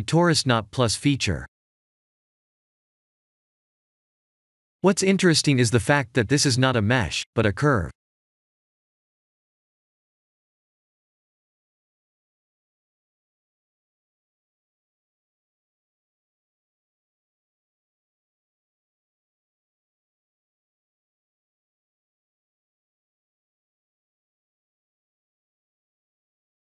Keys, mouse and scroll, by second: 7.6 click, 8.5 click, 8.8 middle click, 17.2 click, 21.0 click, 23.0 click, 23.5 shift+click, 24.6 h, 25.5 click, 26.4 click.